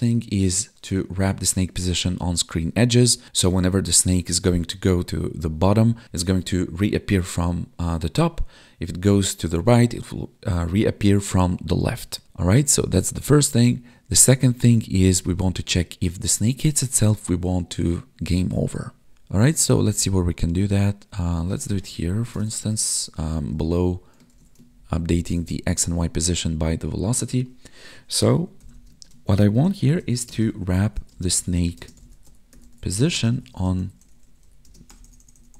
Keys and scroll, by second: 21.8 Tab, 23.1 Up, 23.5 Tab, 24.3 ctrl+s, 24.7 ctrl+Down, 28.9 space, 30.3 space, 31.1 space, 31.8 space, 33.1 space, 33.5 space, 34.7 space.